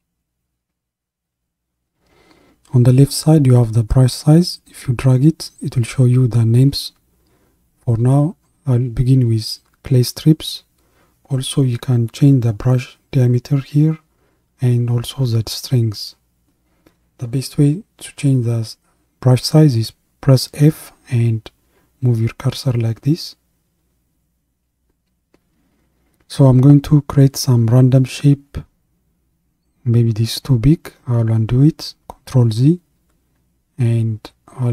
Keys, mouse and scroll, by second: 3.8-15.2 drag, 15.2-17.9 shift+middle drag, 17.9 f, 23.7-27.8 middle drag, 27.8-31.5 drag, 31.5 ctrl+z.